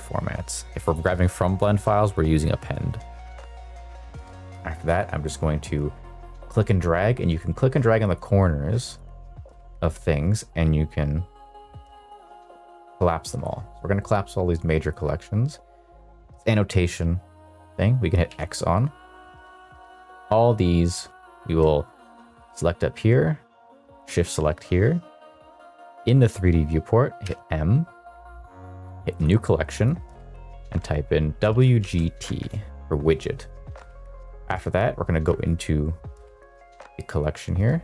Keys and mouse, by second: 0.8-2.9 drag, 4.3-5.3 drag, 7.4-8.2 drag, 9.1-12.6 drag, 14.8 click, 18.3 x, 19.2 click, 21.1 shift+click, 21.9 click, 27.1 m, 32.4 Return, 34.2 click, 36.1 click.